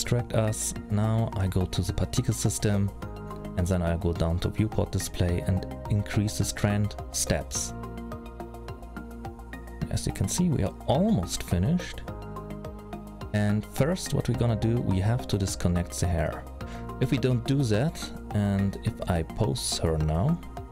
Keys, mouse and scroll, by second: 0.7-1.7 scroll up 6, 1.9 click, 6.7 click, 6.8 click, 8.5 click, 8.5 middle click, 9.3-10.0 scroll down 6, 9.8 middle click, 15.1-15.8 scroll down 3, 15.8-16.4 scroll up 4, 16.4 middle click, 16.4-17.7 scroll up 1, 18.3 click, 19.6 click.